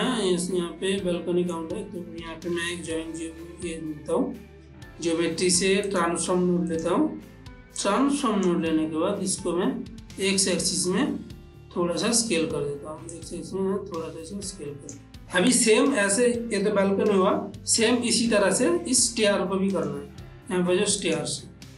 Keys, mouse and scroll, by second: 2.6 shift+a, 5.9 click, 6.8 click, 7.9-13.2 drag, 13.2-15.1 shift+drag, 15.1 ctrl+middle click, 17.0 ctrl+middle click, 17.1 shift+middle click, 19.8 click, 21.1 click.